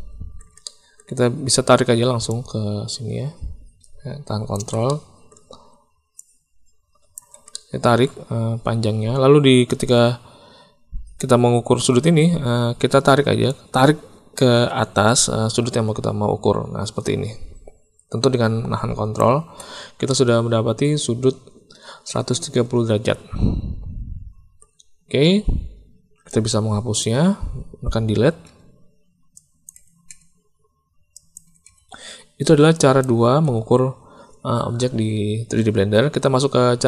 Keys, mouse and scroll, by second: 0.6 shift+click, 2.3-4.5 drag, 4.8 middle click, 6.2 ctrl+click, 7.5 middle click, 13.5-19.2 drag, 20.0-24.6 drag, 26.2 click, 28.0 Delete, 28.4 Delete, 29.3 middle click, 30.0 Delete, 31.1 click, 31.4 Delete, 31.6 Delete, 32.7 click, 33.0 Delete, 33.4 Delete.